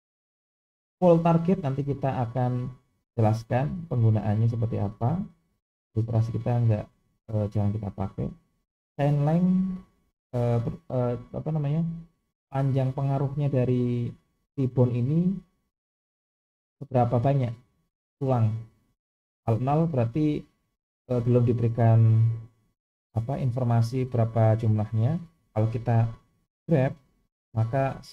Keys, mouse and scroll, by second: 24.9 click, 26.7 g.